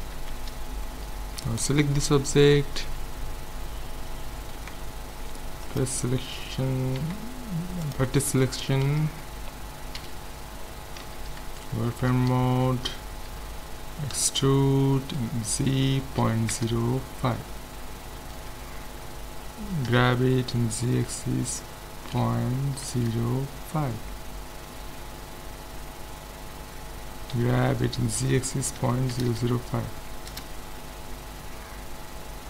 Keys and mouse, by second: 0.2 Tab, 1.4-3.3 right drag, 3.0 Tab, 4.6 ctrl+Tab, 7.0 ctrl+Tab, 8.9 a, 9.9 KP_1, 11.0 z, 14.2 e, 19.9 g, 27.3 g, 31.4-32.4 middle drag.